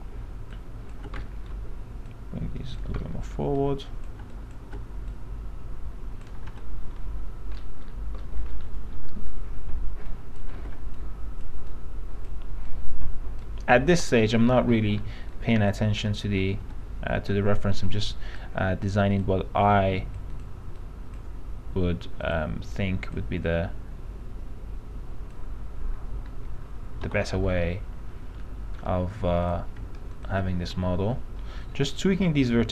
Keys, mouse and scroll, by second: 0.7 ctrl+click, 1.4 alt+middle click, 2.3 click, 3.3 alt+middle click, 3.7 click, 4.5 ctrl+click, 5.7-6.7 drag, 6.7 l, 7.8-8.4 scroll up 1, 8.4 middle click, 8.6-9.1 scroll down 1, 9.1 scroll down 1, 9.3-10.2 scroll up 1, 10.2 click, 11.1-14.0 drag, 14.0 p, 14.6 alt+middle click, 15.5-16.5 drag, 16.8 l, 17.9-25.6 drag, 27.2 p, 27.4 middle click, 28.6 alt+middle click, 29.6 click, 30.3 ctrl+click, 31.0 ctrl+i, 31.8 click.